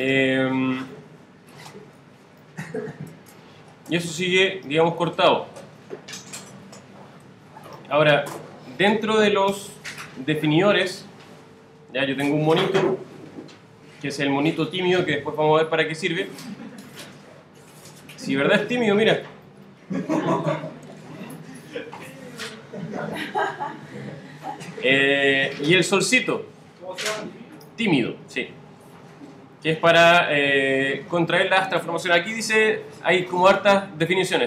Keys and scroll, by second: 4.9 super+z, 9.5 alt+super++, 27.3 alt+super+-, 32.5 alt+super+-.